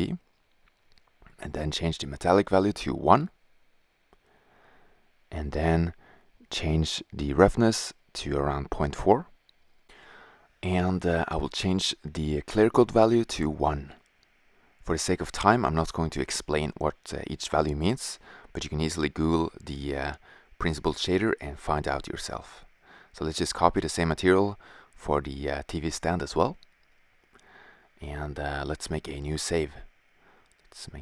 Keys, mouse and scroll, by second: 0.8-2.0 drag, 2.4 shift+z, 6.3-7.5 drag, 13.6 click, 13.9 click, 14.3 click, 16.1 click, 18.0 middle click.